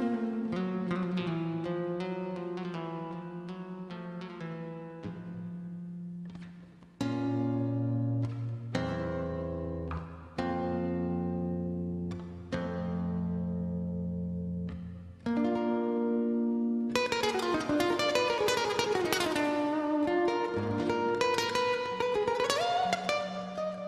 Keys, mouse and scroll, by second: 0.4 click, 2.2-2.6 typing, 3.7 click, 8.6 click, 9.1-9.5 scroll down 1, 9.5-10.0 scroll up 1, 10.0 middle click, 10.2 scroll up 1, 13.4 click, 13.7 scroll down 1, 14.9 click, 22.9 scroll up 1.